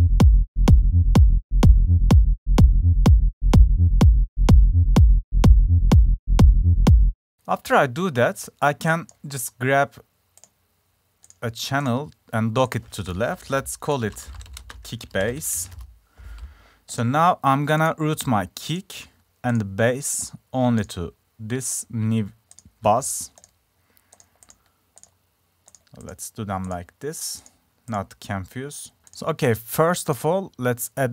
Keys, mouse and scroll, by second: 7.3-8.4 drag, 9.2-10.6 drag, 11.9 click, 12.2 click, 12.3 click, 17.2 click, 17.5-18.2 drag, 23.5 click, 25.8-27.2 drag, 27.5-28.1 drag, 29.0-30.1 drag.